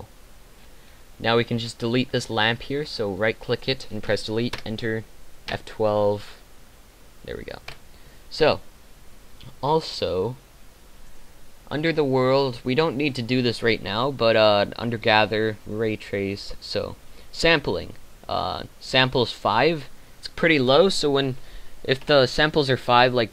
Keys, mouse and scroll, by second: 0.0 Escape, 3.2 right click, 4.0 Delete, 7.8 F12, 7.8 Escape.